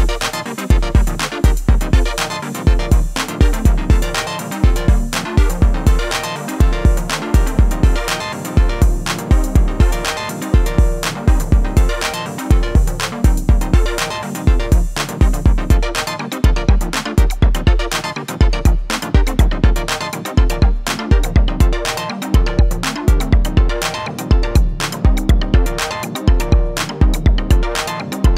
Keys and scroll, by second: 2.5 Delete.